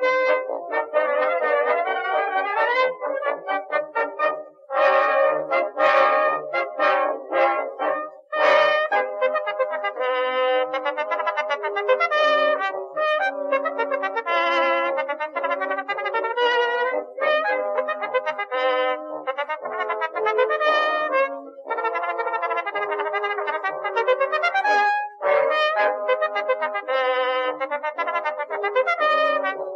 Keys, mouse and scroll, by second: 0.3 middle click, 1.7 middle click, 2.2 middle click, 2.8 click, 3.1-4.1 middle drag, 4.2 click, 5.1 middle click, 5.2 click, 6.9 middle click, 7.3 e, 8.9 a, 9.1 Tab, 11.3 Tab, 12.4-13.4 typing, 14.3 click, 14.5 middle click, 15.3 a, 15.6 Tab, 15.9 click, 16.5 Tab, 16.7 a, 17.4 click, 18.0 a, 18.2 Tab, 19.8 middle click, 20.0 middle click, 20.7 middle click, 21.3 Tab, 23.1 right click, 23.3 middle click, 23.9 shift+d, 25.2 p, 25.5 Tab, 25.8 Tab, 26.5 a.